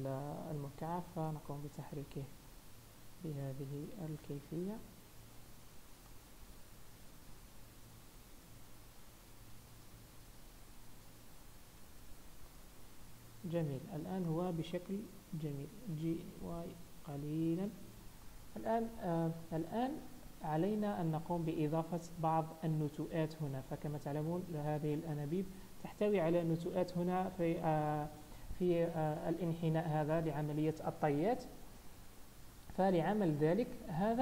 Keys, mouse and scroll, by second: 0.1-0.8 scroll up 1, 0.8 g, 2.3-2.6 scroll down 2, 2.6 middle click, 4.7 KP_1, 5.3 z, 7.3 g, 10.5 scroll down 3, 12.0 z, 12.8 middle click, 14.5 scroll up 3, 14.8 middle click, 16.1 g, 18.0 scroll down 3, 18.3 middle click, 19.3-19.7 scroll up 3, 19.9 shift+middle click, 20.3-20.8 scroll up 2, 21.0 scroll up 1, 21.9 shift+middle click, 25.0 shift+middle click, 32.3-32.9 scroll down 2, 32.9 middle click.